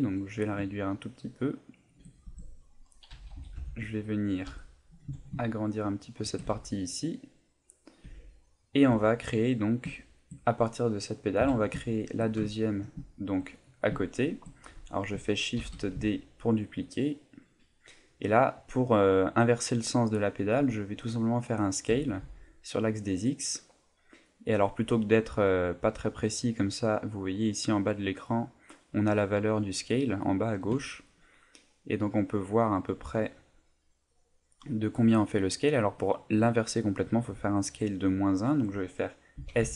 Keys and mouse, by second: 1.9 shift+click, 2.2 Tab, 2.5 middle click, 3.1-5.0 typing, 6.4 Tab, 6.7 middle click, 8.0 Tab, 8.2 middle click, 8.8 Tab, 9.1 middle click, 10.0 shift+middle click, 11.4 KP_7, 12.0 shift+middle click, 12.5 ctrl+middle click, 13.0 shift+middle click, 15.6 shift+d, 17.5 click, 21.9 s, 36.6 right click, 39.4 s.